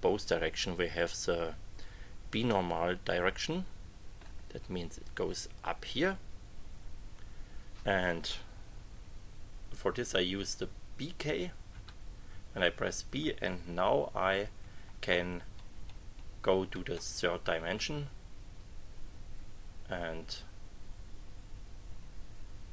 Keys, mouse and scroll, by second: 2.5-4.4 drag, 11.7 b, 14.0 Page_Up, 15.4 Page_Down.